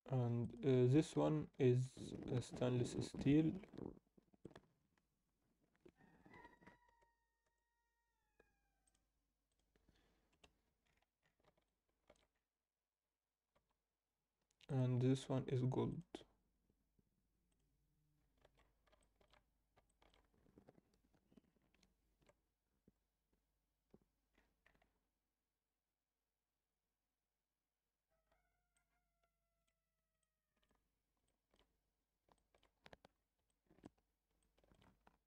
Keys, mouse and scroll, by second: 0.4 click, 6.4 Tab, 7.0 a, 7.4 u, 10.3 KP_0, 10.8-11.4 scroll up 5, 11.6 alt+shift+middle click, 12.3-13.2 scroll up 1, 13.6 Tab, 14.6 click, 15.9-18.1 drag, 18.1 scroll down 2, 18.4 alt+a, 19.0 alt+shift+middle drag, 19.5 scroll down 1, 19.9 alt+shift+middle click, 24.2-25.0 scroll up 4, 28.2-28.6 scroll down 2, 28.7-29.6 alt+middle drag, 30.2-30.7 middle drag, 31.2 alt+middle click, 32.3 alt+middle drag, 33.1 scroll down 2, 33.4-33.8 alt+middle drag, 34.0 scroll down 2, 34.3-34.7 alt+middle drag.